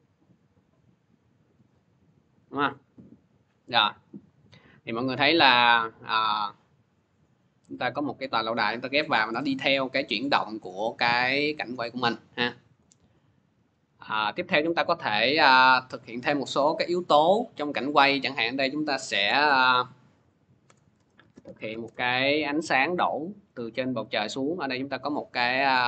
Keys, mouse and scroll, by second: 0.2 click, 0.8 click, 1.3 click, 2.0-2.4 scroll up 1, 2.4 middle click, 3.1 middle click, 5.9 scroll, 7.3 scroll, 7.8 click, 8.3 scroll, 9.2-9.8 scroll, 10.2 middle click, 10.9-11.5 scroll down 4, 11.0 middle click, 11.1 middle click, 11.1 click, 11.5 scroll, 11.7 click, 13.4 click, 14.2 middle click, 15.1 click, 16.0 click, 16.7 click, 19.3 ctrl+d, 20.5 Return, 20.8-22.0 typing, 23.3 scroll, 24.3 middle click, 24.3 typing, 24.6 click.